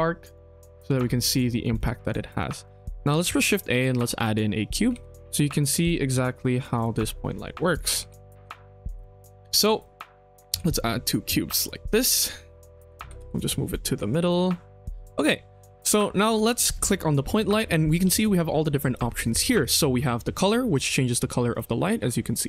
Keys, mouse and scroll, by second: 0.6 click, 0.8 KP_1, 1.4 shift+middle drag, 1.7 middle drag, 2.2-2.5 scroll up 2, 2.6 shift+middle drag, 3.0 shift+a, 4.8 g, 5.6 KP_1, 6.0 g, 6.9 middle drag, 7.2-7.7 scroll down 2, 7.7 click, 7.9 g, 9.1 scroll up 2, 9.3-9.6 middle drag, 9.7 shift+middle drag, 10.2 click, 10.4 shift+d, 11.8 scroll up 1, 11.9 KP_1, 12.3-12.6 scroll down 4, 12.7 click, 12.9 g, 15.0 middle drag, 15.3 scroll up 2, 15.7 click, 16.0 shift+middle drag, 16.2 shift+scroll up 1, 16.4 click, 20.7 click, 21.4 click.